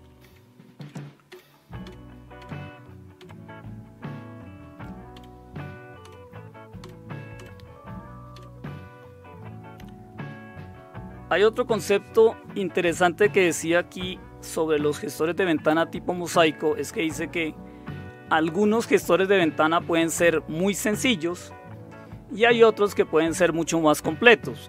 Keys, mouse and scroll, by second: 0.2 Left, 0.8 Left, 1.3 Left, 1.8 Left, 2.4-3.2 Left, 5.1 Left, 7.3 Left, 8.3 Left.